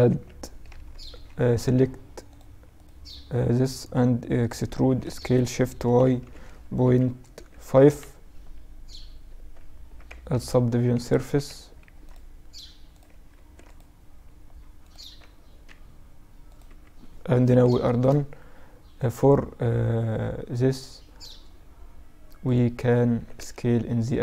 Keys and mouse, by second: 0.0 KP_Add, 1.6 click, 3.6 right click, 4.1 e, 8.5 Tab, 9.7 ctrl+2, 10.4 Tab, 11.0 ctrl+r, 12.6 ctrl+r, 14.2 Tab, 15.8-18.3 drag, 15.9 t, 16.8 KP_Divide, 18.3-19.3 right drag, 19.3 click, 19.4 right click, 22.4 s.